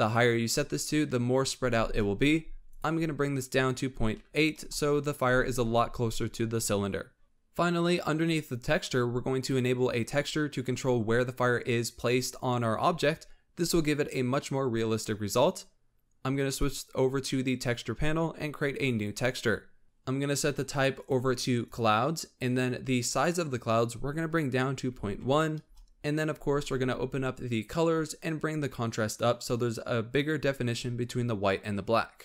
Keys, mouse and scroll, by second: 2.5-5.6 drag, 7.2-7.9 scroll down 7, 8.6 click, 9.2-9.6 drag, 9.6-10.1 scroll down 10, 16.3 click, 18.7-20.7 drag, 20.9-26.2 drag, 27.3-28.0 drag, 28.0 scroll down 3, 29.2-32.1 drag.